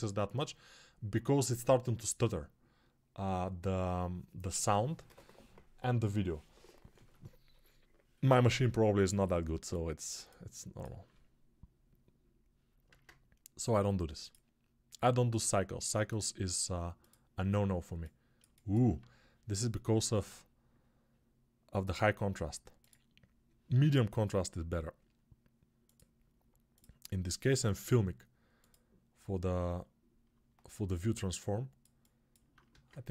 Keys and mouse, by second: 12.8 ctrl+space, 17.7-18.7 alt+drag, 32.6 ctrl+space.